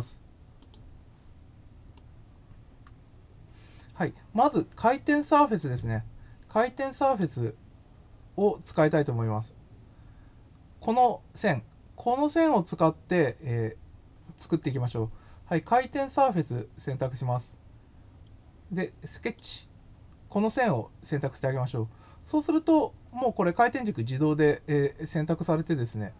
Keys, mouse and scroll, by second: 0.6 click, 1.9-4.4 middle drag, 5.6 click, 7.0 click, 15.6 drag, 19.2 click.